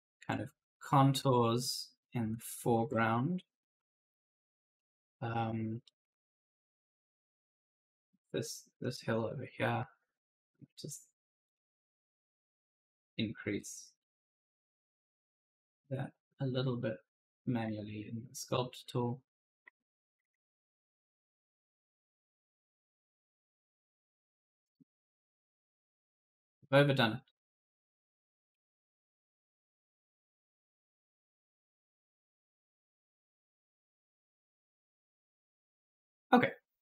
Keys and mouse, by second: 1.1 alt+Tab, 2.7 alt+Tab, 2.9-7.0 typing, 3.0 right click, 5.7 right click, 8.0 s, 9.0 click, 12.5 click, 13.9 right click, 15.2 click, 16.6 right click, 17.7 shift+click, 19.2 click, 20.4 shift+click, 21.8-23.8 typing, 22.0 right click, 22.3 right click, 24.7 click, 26.5 right click, 27.2 click, 30.0 click, 32.8-36.8 typing, 32.9 right click.